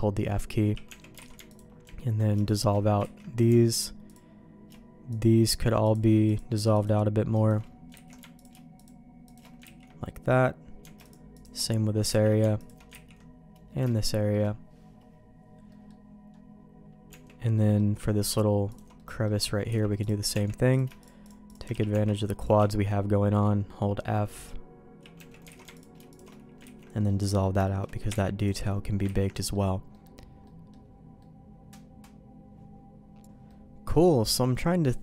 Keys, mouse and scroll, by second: 0.8 Tab, 1.2 alt+a, 1.4 alt+click, 2.4 alt+shift+click, 3.1 ctrl+x, 4.1 alt+click, 6.2-7.5 alt+shift+drag, 7.9 ctrl+x, 9.6 ctrl+x, 10.0 middle click, 12.2 ctrl+x, 12.6 click, 13.1 ctrl+x, 13.8 middle click, 15.6 middle click, 17.0 Tab, 17.5 middle click, 18.7 click, 18.9 middle click, 19.6 x, 20.3 Tab, 20.7 click, 21.0 shift+click, 21.7 f, 21.9 Tab, 22.4 click, 22.6 f, 23.0-24.9 f, 25.1 Tab, 25.1 f, 25.5 alt+a, 26.1 alt+shift+click, 26.6 ctrl+x, 26.9 middle click, 27.2 middle click, 27.6 shift+middle click, 28.4 alt+click, 29.2 ctrl+x, 29.3 middle click, 29.9 middle click, 30.4 middle click, 31.2 middle click, 33.4 middle click, 34.4 middle click, 34.9 middle click.